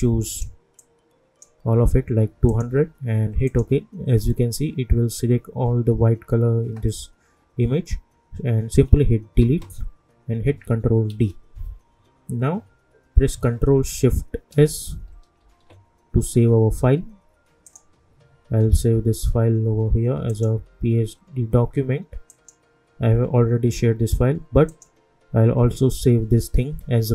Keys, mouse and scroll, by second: 0.0-2.5 drag, 11.1 ctrl+d, 13.8 ctrl+d, 15.4 ctrl+shift+s, 17.6 click, 20.3 click, 24.6 click.